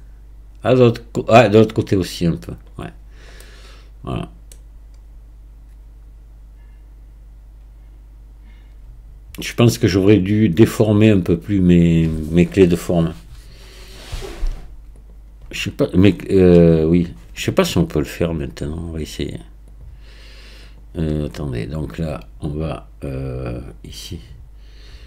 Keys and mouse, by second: 3.5-4.7 middle drag, 19.9 click.